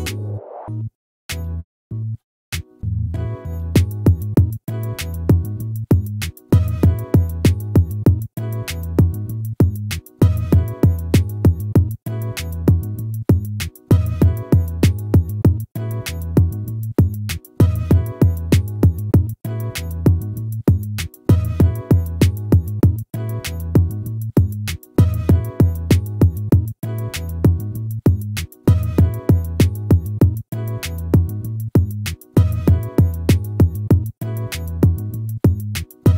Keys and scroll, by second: 3.7 ctrl+z, 5.0 ctrl+-, 17.7 ctrl+z, 20.4 ctrl+z.